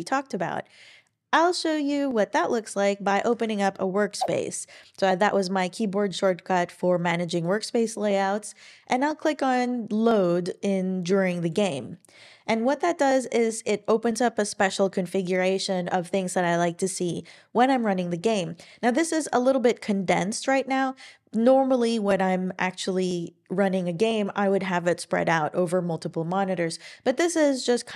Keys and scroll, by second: 3.3 alt+super+w.